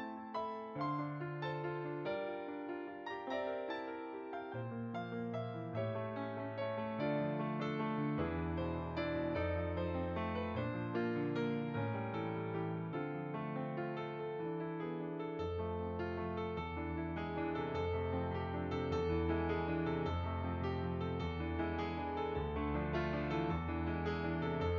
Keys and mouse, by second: 0.7 right click, 2.5 right click, 3.3 click, 5.1 s, 6.1 click, 7.0 g, 8.2 click, 9.7 Tab, 9.7 click, 16.0 shift+a, 21.2 click, 23.4 s, 23.4 click, 24.3 g.